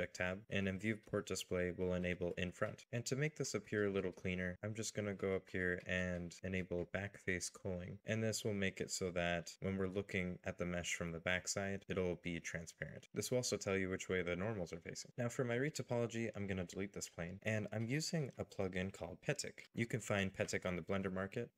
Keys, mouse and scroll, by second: 0.2-2.6 scroll down 1, 8.6 middle click, 11.9 alt+n, 14.1 middle click, 16.1 x, 20.8 scroll down 1.